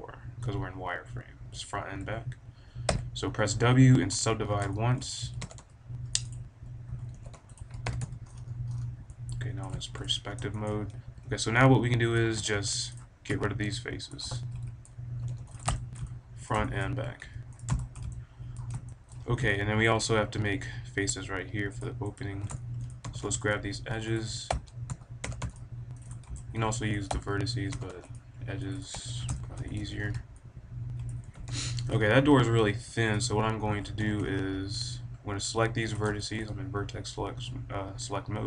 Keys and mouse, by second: 1.9 KP_1, 2.8 w, 4.7 click, 5.1 a, 5.3 b, 6.8 a, 7.0 b, 7.5 click, 7.8 KP_5, 7.9 z, 8.2-9.5 middle drag, 10.1 click, 10.2 middle click, 12.2 b, 13.2 x, 14.5 middle click, 15.2 b, 15.9 middle click, 16.2 middle click, 17.2 x, 18.1 click, 18.2 middle click, 18.3 click, 18.3 middle click, 18.5 click, 18.8 middle click, 19.0 click, 19.1 middle click, 19.2 click, 19.5 middle click, 19.7-21.1 drag, 21.1 middle click, 21.7-22.9 drag, 22.9-24.9 middle drag, 23.0 b, 24.5 f, 24.9 a, 25.2 b, 25.8 click, 27.0 f, 27.5 a, 28.4 b, 28.4 f, 29.7 a, 29.9-31.2 drag, 31.2 KP_1, 31.4 KP_5, 33.3 click, 33.6 z, 33.9 b, 34.9 middle click, 35.9-38.0 drag, 38.0-38.4 middle drag.